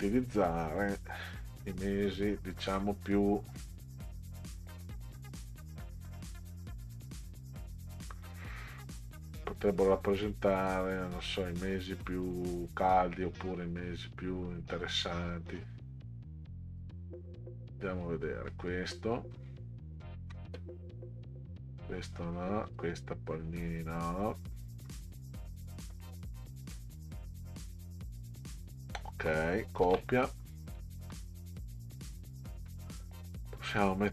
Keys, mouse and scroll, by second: 0.2-2.6 drag, 3.6-4.4 drag, 5.2 click, 7.3-9.7 drag, 10.8-16.8 drag, 18.5-19.0 middle drag, 20.0 shift+click, 22.7 shift+click, 24.4 shift+click, 25.5 middle click, 26.8 middle click, 29.8 ctrl+c, 30.2 middle click, 31.4 middle click, 32.0 middle drag, 32.7 middle click.